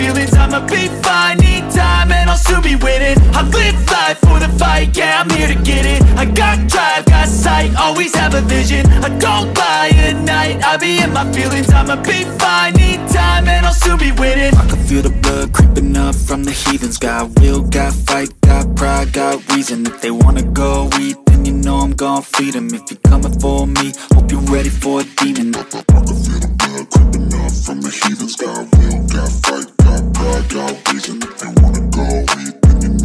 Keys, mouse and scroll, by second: 1.6 click, 2.2-5.7 drag, 5.7 Tab, 7.1 a, 7.5 a, 8.0 click, 8.4 Tab, 9.0 click, 9.8 Tab, 10.2-10.6 scroll up 2, 10.6 scroll down 1, 10.8 Tab, 11.9 click, 12.6 click, 14.3-15.3 drag, 18.5 click, 20.0 Tab, 21.7 click, 23.0 shift+click, 23.7 click, 24.7 Tab, 25.0 click, 25.9 click, 26.9-27.9 drag, 27.9-29.9 scroll down 16, 30.0-31.9 drag, 31.9-32.5 scroll down 2, 32.5-33.0 scroll down 2.